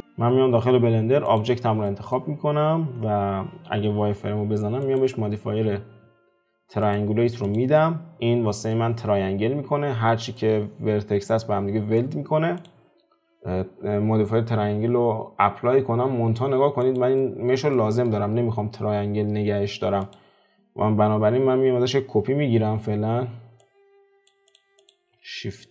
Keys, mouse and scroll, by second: 0.3-0.8 middle drag, 0.8-1.4 scroll up 2, 1.4 click, 1.9-2.3 middle drag, 2.3-3.7 scroll up 2, 3.7 F4, 6.9-7.5 drag, 7.8-9.7 middle drag, 9.7-10.3 scroll down 1, 10.3-12.6 middle drag, 12.6 click, 13.3 click, 16.9 click, 17.4-20.1 shift+middle drag, 20.1 click, 24.3 click, 25.6 shift+d.